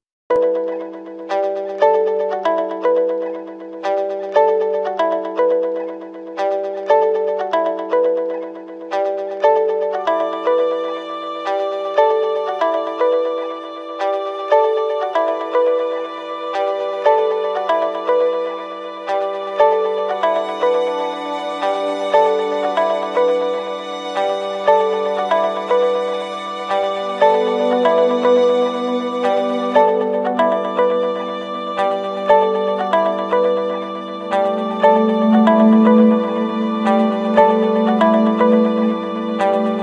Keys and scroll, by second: 1.8 Return, 11.9 ctrl+z, 14.4 ctrl+0, 16.2 ctrl+=, 16.7 ctrl+space, 17.0 ctrl+=, 19.9 ctrl+z, 24.5 Return, 30.8 ctrl+-, 37.2 ctrl+-.